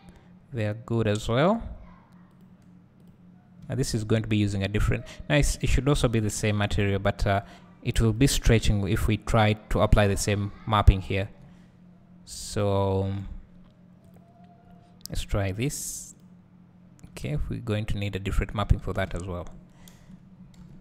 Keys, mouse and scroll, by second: 3.3 click, 5.5 click, 8.4-14.3 drag, 11.7 ctrl+z, 12.4 scroll down 1, 15.8-19.2 drag, 17.6 ctrl+z, 17.8 scroll down 1, 19.2 `, 20.0 KP_0, 20.1 click.